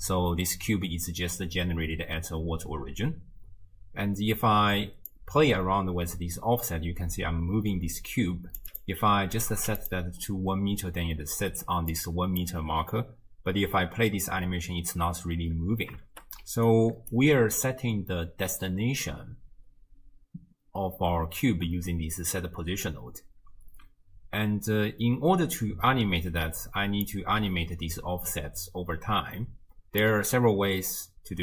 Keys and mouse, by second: 5.1-8.6 drag, 8.7-9.8 drag, 11.6-12.6 d, 11.9 click, 13.7 space, 15.6 space, 16.4 d, 16.7 click, 17.2 d, 17.3 d, 27.1-30.0 drag.